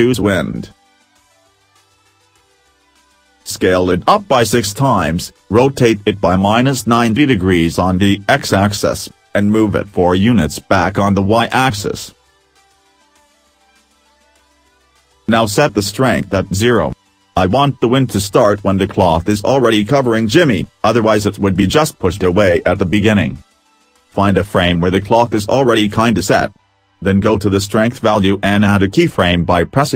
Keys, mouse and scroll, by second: 2.7 s, 4.4 w, 5.2 middle click, 5.2 scroll down 1, 6.2 r, 8.2 middle click, 10.1 g, 12.0 middle click, 13.4-13.9 scroll up 2, 13.9 middle click, 16.4 click, 20.5 click, 23.1 right click, 24.5 right click.